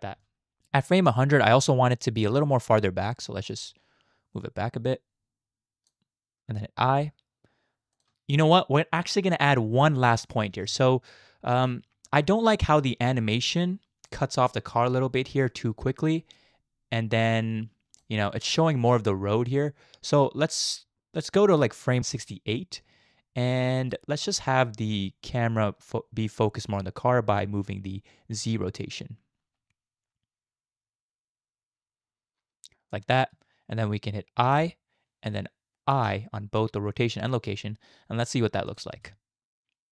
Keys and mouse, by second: 0.2 space, 0.2-1.5 drag, 3.6-6.0 shift+drag, 6.9 i, 7.9 click, 8.1 space, 10.5 space, 10.7-14.1 drag, 16.4-18.0 drag, 19.9-23.9 drag, 25.6-33.0 drag, 34.4 i, 35.9 i, 38.7 click, 38.9 space.